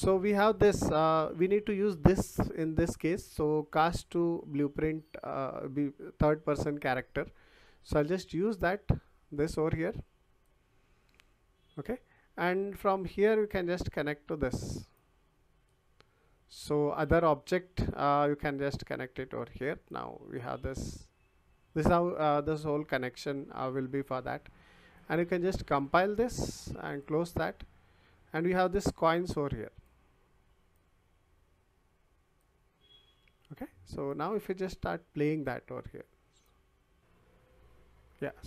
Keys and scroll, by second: 36.4 w.